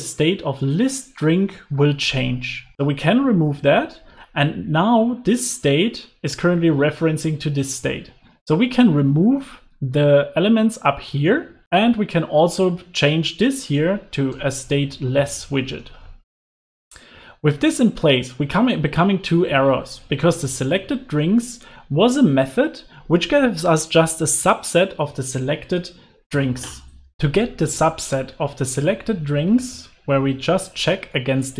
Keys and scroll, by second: 3.1 super+x, 3.4 super+s, 11.2 super+x, 30.1 alt+shift+Left.